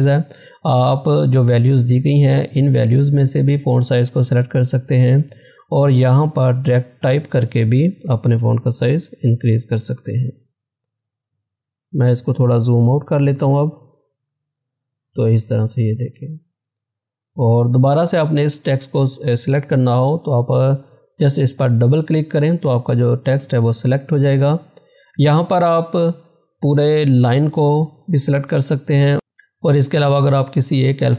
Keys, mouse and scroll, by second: 6.2 click, 7.9-9.0 typing, 10.0 Return, 12.0 click, 12.9 ctrl+-, 15.6 ctrl+=, 20.8 ctrl+=, 20.8 click, 25.4 click, 29.1 click.